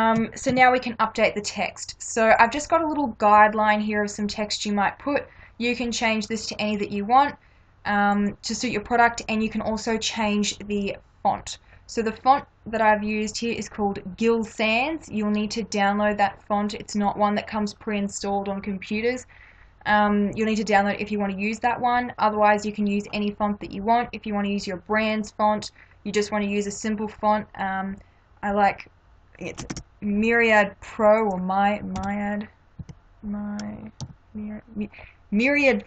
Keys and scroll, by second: 0.2 Up, 29.7 ctrl+a, 32.0 m, 32.8 y, 34.0 r.